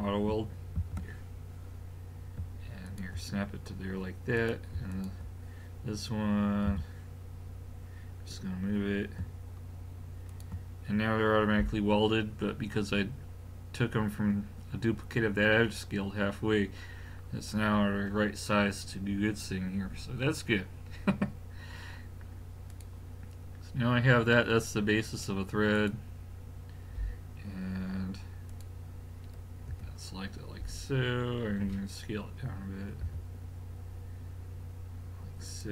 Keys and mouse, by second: 0.8 shift+d, 4.4-6.7 drag, 6.7 g, 22.7 click, 23.6 middle click, 25.8-27.4 middle drag, 27.4 click, 29.7 l, 33.1 s.